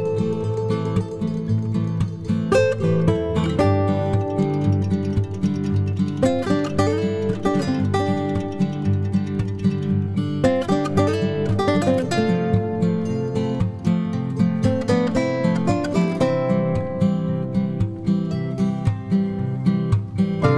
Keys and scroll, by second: 3.1-3.8 typing, 4.7 ctrl+d, 11.6-14.2 typing, 15.6 b.